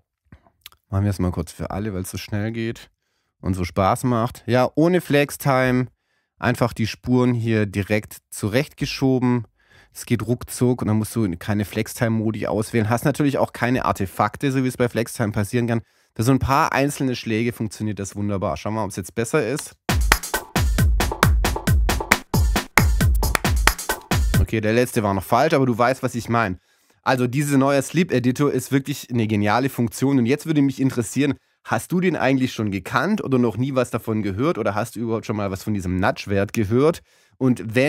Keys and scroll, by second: 3.4 shift+Right, 5.5 shift+Left, 10.0 shift+Right, 12.4 shift+Left.